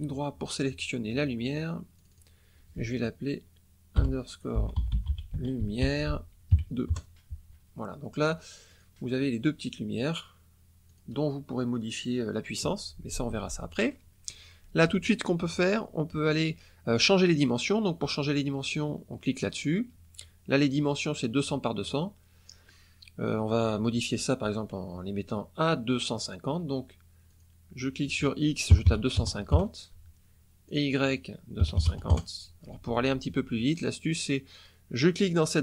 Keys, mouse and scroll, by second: 1.9 click, 4.5-6.5 typing, 6.8 KP_Enter, 8.6 click, 9.9 click, 10.8 click, 17.2 click, 18.1 click, 27.2 click, 28.6 KP_2, 28.8 KP_5, 29.4 KP_Enter, 30.6 click, 31.5 KP_2, 31.7 KP_5, 31.8 KP_0, 32.0 KP_Enter.